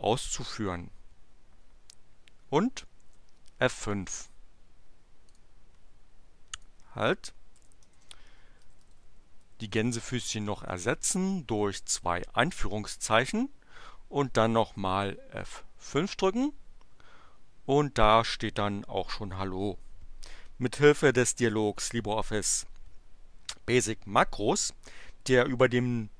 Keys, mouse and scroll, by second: 3.0 F5, 5.3 click, 6.6 click, 7.5 Delete, 7.9 shift+2, 8.6 Right, 10.3 shift+BackSpace, 10.5 shift+2, 15.8 F5.